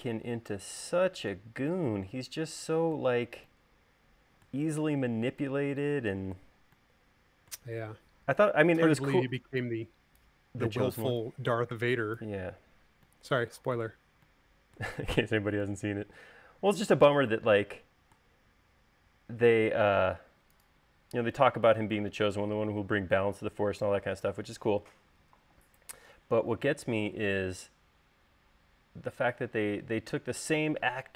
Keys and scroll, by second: 21.8 space.